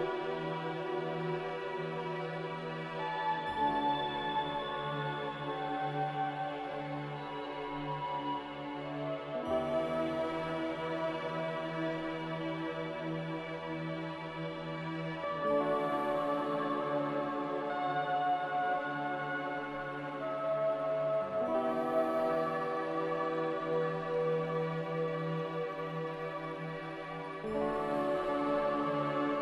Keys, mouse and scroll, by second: 9.6 Delete, 15.9 z.